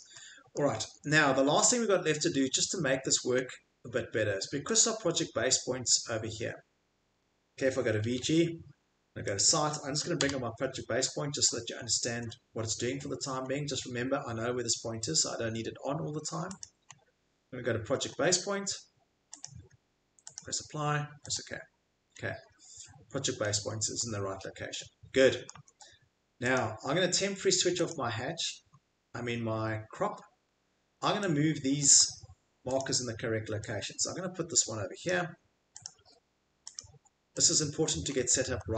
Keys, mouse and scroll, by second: 0.6 click, 0.8 Escape, 1.1 click, 1.2 click, 3.4 click, 3.4 click, 5.5 right click, 7.9-8.7 typing, 9.4 click, 10.2 s, 10.6 middle click, 11.0-13.5 scroll, 15.4 scroll, 16.6 click, 16.9 middle click, 17.0 middle click, 17.4 middle click, 17.4 middle click, 19.4 click, 20.3 click, 21.3 click, 22.0 middle click, 22.4 middle click, 23.4 middle click, 23.7 middle click, 23.7 middle click, 25.4 middle click, 25.5 Escape, 26.5 click, 27.5 scroll, 27.9 click, 28.8 scroll, 30.0-30.6 scroll, 31.8 click, 32.0 Escape, 32.8 click, 35.0 click, 35.8 click, 36.8 click.